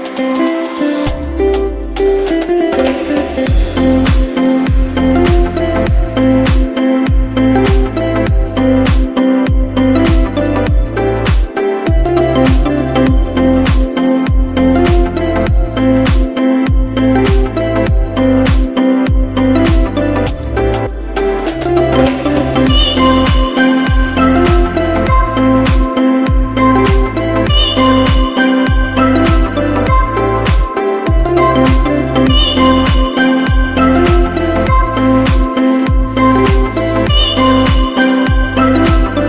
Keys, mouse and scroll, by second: 0.5 click, 2.7 scroll up 3, 3.3 click, 4.8 right click, 6.0 scroll down 1, 6.8 scroll down 1, 7.4 middle click, 7.4 scroll down 4, 8.2 click, 10.5 t, 11.2 click, 11.9 click, 12.8 scroll down 1, 13.5-14.1 scroll down 9, 14.2 click, 14.7-15.1 scroll up 5, 17.8 click, 18.5 click, 20.2 scroll up 2, 20.8 right click, 20.8 scroll up 1, 23.4 middle click, 25.3 click, 26.5 click, 33.2 right click, 35.2 t, 36.6 click, 37.6 scroll down 3, 38.4 click, 38.4 scroll down 2, 39.0-39.2 scroll up 4.